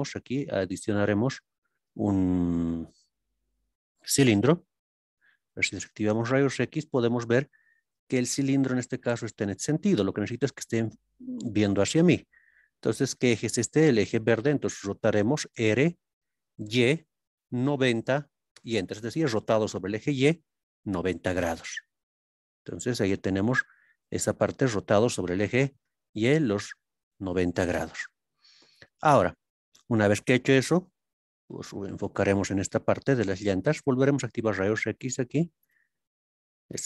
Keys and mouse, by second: 0.2 shift+a, 6.6-8.2 middle drag, 11.8 ctrl+KP_3, 16.6 y, 17.8 KP_9, 17.8 KP_0, 18.5 KP_Enter, 24.1 middle click, 25.5 ctrl+KP_3, 27.2-29.0 shift+middle drag, 31.2 shift+middle click, 33.7 click, 34.9 click, 35.6 click, 36.5 click.